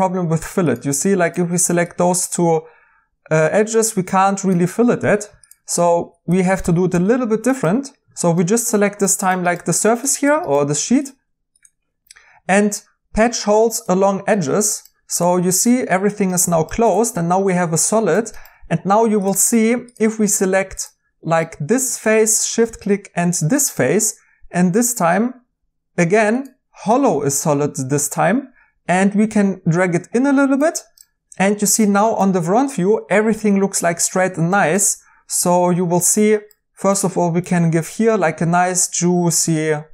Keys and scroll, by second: 5.0 Escape, 9.6 ctrl+Tab, 11.1 Tab, 34.8 2.